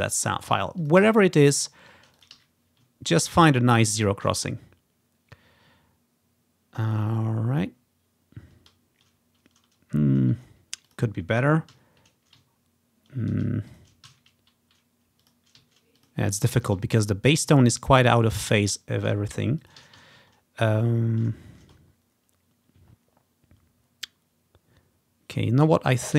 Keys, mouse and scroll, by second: 0.1-3.9 drag, 0.6 z, 1.1 z, 1.6 ctrl+scroll down 1, 2.4 z, 2.8-3.1 scroll down 1, 3.1-4.4 ctrl+scroll up 1, 4.4 ctrl+scroll down 2, 5.4 ctrl+scroll up 1, 6.1 ctrl+scroll down 2, 6.7-7.1 ctrl+scroll up 3, 7.4-7.9 ctrl+scroll down 2, 8.2 ctrl+scroll up 2, 8.8 ctrl+scroll down 1, 9.7 ctrl+scroll down 1, 11.0 click, 11.8 z, 13.2 scroll down 1, 13.8-14.9 ctrl+drag, 14.2 z, 15.0 click, 15.7-16.9 typing, 16.1 click, 16.4 click, 16.9-18.2 ctrl+drag, 17.0-17.4 ctrl+scroll down 2, 17.4-18.5 ctrl+scroll up 3, 18.5 scroll down 1, 19.7-21.1 drag, 19.9 typing, 20.2 scroll up 1, 22.0 scroll down 1, 23.0 scroll up 1, 23.1 scroll down 1, 23.1 ctrl+scroll up 1, 23.9 ctrl+scroll down 1, 24.8 ctrl+scroll up 1, 26.0-26.1 drag.